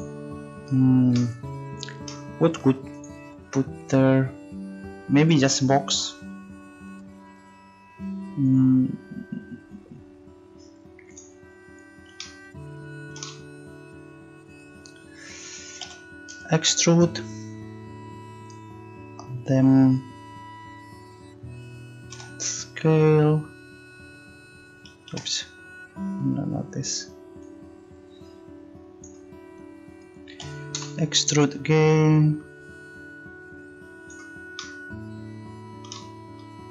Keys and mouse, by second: 15.8 e, 22.1 s, 27.4-29.2 drag, 30.4 e, 31.9-33.6 drag.